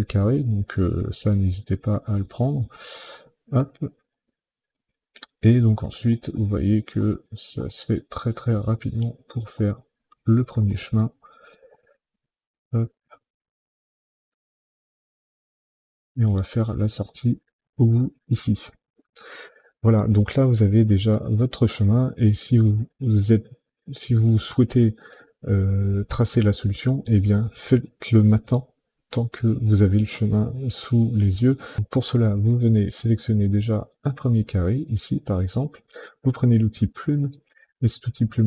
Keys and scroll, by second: 1.5 Delete, 2.4 Delete, 3.2 Delete, 5.3 Delete, 6.2 Delete, 6.9 Delete, 8.6 Delete, 9.4 Delete, 10.6 Delete, 12.6 Delete, 13.6 Delete, 14.4 Delete, 15.7 Delete, 16.3 Delete, 17.8 Delete, 35.8 p.